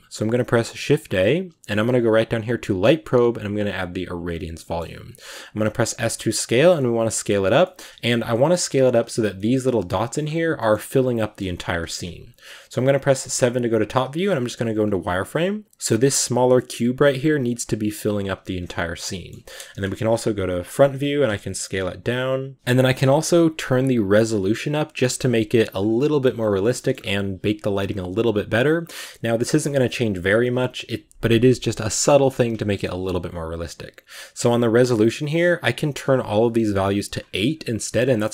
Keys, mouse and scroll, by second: 4.4 middle drag, 4.6-5.4 scroll up 3, 5.5 s, 6.6 middle click, 7.4 scroll down 1, 7.5 middle click, 8.1 g, 9.2 middle click, 10.0 s, 11.6 KP_7, 12.2 scroll down 2, 13.0 z, 14.1 z, 14.8 g, 15.6 g, 17.4 g, 18.1 g, 18.7 scroll down 1, 18.9-19.6 middle drag, 19.6 KP_1, 20.4 g, 21.0 s, 22.5 right click, 26.1-26.5 scroll up 1, 26.6 shift+middle click, 26.8 scroll up 2, 29.5-36.6 shift+middle drag, 36.6-37.9 drag.